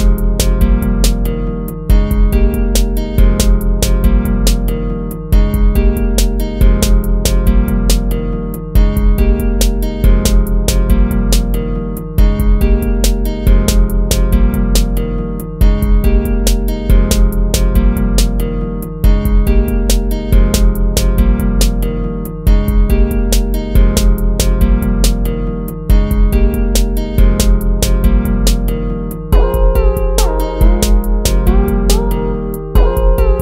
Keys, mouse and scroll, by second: 1.5 ctrl+z, 2.3 ctrl+z, 2.7 ctrl+-, 4.8 ctrl+-, 6.2 ctrl+-, 8.0 ctrl+z, 8.3 ctrl+-, 10.0 ctrl+z, 10.3 ctrl+z, 12.2 ctrl+z, 12.8 ctrl+-, 13.4 ctrl++, 13.7 ctrl+z, 14.0 ctrl+-, 14.6 ctrl++, 15.6 ctrl+z, 17.4 ctrl+-, 18.5 ctrl++, 19.4 ctrl+-, 19.9 ctrl+-, 21.4 ctrl+z, 22.5 ctrl+z, 23.4 ctrl+-, 24.0 ctrl+z, 24.6 ctrl+z, 25.3 ctrl+-, 27.1 ctrl+z, 28.2 ctrl+-, 28.5 ctrl++, 29.2 ctrl+-, 29.5 ctrl++, 30.5 ctrl+-, 31.1 ctrl+-, 31.3 ctrl++, 31.7 ctrl++, 32.6 ctrl+-.